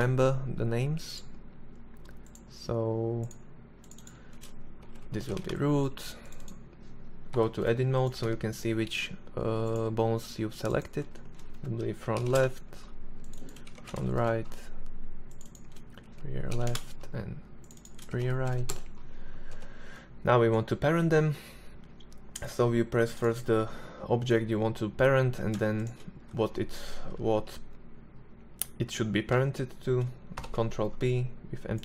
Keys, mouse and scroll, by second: 4.3 o, 7.3 Tab, 17.4 shift+r, 18.6 Tab, 22.2-29.4 right drag, 29.4 ctrl+p.